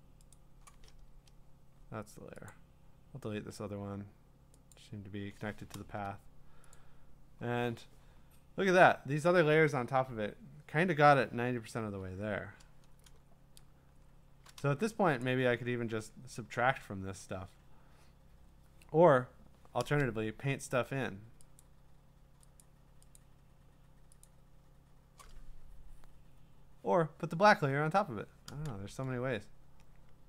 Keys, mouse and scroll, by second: 0.3 click, 1.1 Return, 2.5 click, 4.7 click, 5.8 Return, 6.7 click, 12.0 click, 13.2-14.6 scroll, 15.3 click, 21.6 click, 22.6 click, 23.1 click, 24.2 click.